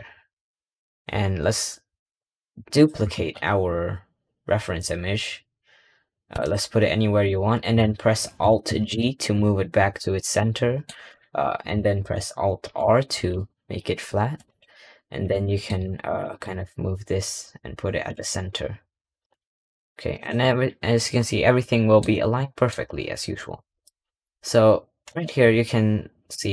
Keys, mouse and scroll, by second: 2.0-2.3 scroll down 4, 2.6 click, 3.0 shift+d, 7.1-8.7 middle drag, 8.7 alt+g, 10.2 scroll up 1, 10.4-12.5 middle drag, 12.5 alt+r, 14.3 click, 14.8-15.3 scroll up 1, 15.3 shift+middle click, 15.7 scroll up 1, 16.0 click, 16.3 g, 18.2-19.2 scroll up 1, 20.4 middle click, 21.9 scroll down 2, 22.3 middle click, 22.8 scroll up 1.